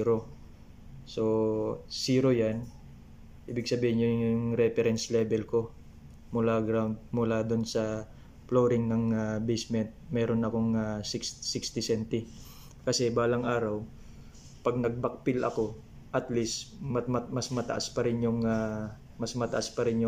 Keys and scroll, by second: 4.8 ctrl+v, 8.0 BackSpace, 9.4 typing, 11.2 ctrl+c, 11.3 ctrl+v, 15.5 3, 17.0 ctrl+c, 17.1 ctrl+v.